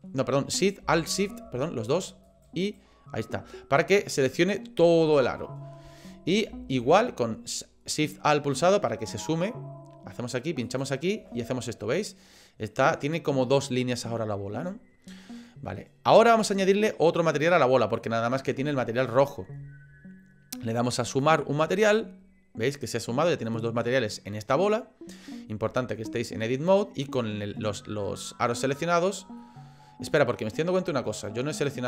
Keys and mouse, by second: 2.2 alt+shift+click, 2.6 alt+shift+click, 10.7 alt+shift+click, 11.4-13.0 middle drag, 17.4 click, 21.2 click, 29.4 middle click, 31.5 click.